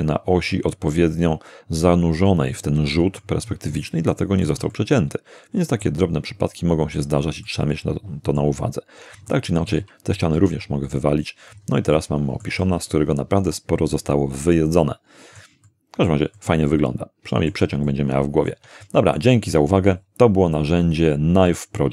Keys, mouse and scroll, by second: 2.5-3.4 middle drag, 4.1-4.6 shift+middle drag, 4.7-6.0 shift+middle drag, 7.5-8.6 middle drag, 9.3 shift+middle click, 10.3 shift+x, 10.9 shift+click, 11.5-11.8 shift+scroll down 2, 12.0-15.6 middle drag, 15.7-16.3 middle drag, 16.4-17.7 middle drag, 17.9-18.7 shift+middle drag, 18.8-19.4 shift+middle drag, 19.5 shift+middle click.